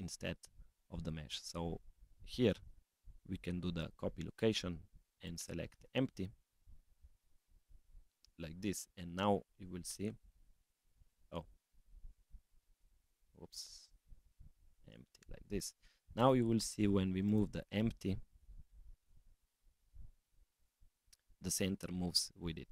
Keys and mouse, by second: 5.2-7.0 drag, 11.0-12.3 drag, 13.5 click, 15.4 click, 16.2 click, 17.2 click.